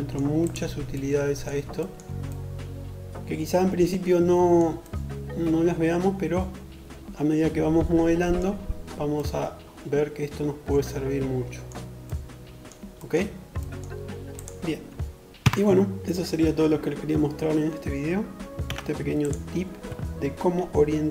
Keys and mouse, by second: 12.3-14.2 middle drag, 14.2 Tab, 17.3 3, 17.8 click, 20.5 shift+KP_7.